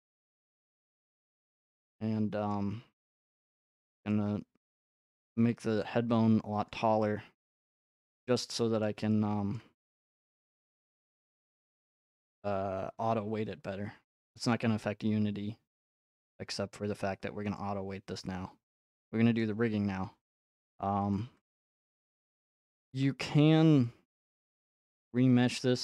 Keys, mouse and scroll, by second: 0.6-1.5 scroll, 1.5 click, 1.6 scroll, 2.5-3.1 scroll, 3.1 g, 3.7 click, 4.2 click, 4.7 click, 6.7-8.8 drag, 8.8-12.2 shift+middle drag, 17.6-21.1 middle drag, 21.1 click, 22.1-22.9 scroll, 22.9 click, 23.4 scroll, 25.0 scroll up 3, 25.0 middle click.